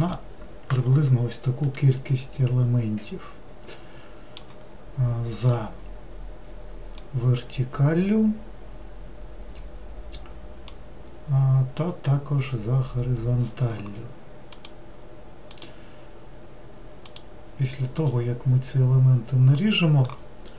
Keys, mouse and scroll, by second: 0.1-3.2 middle drag, 2.0 scroll down 1, 7.0-10.1 middle drag.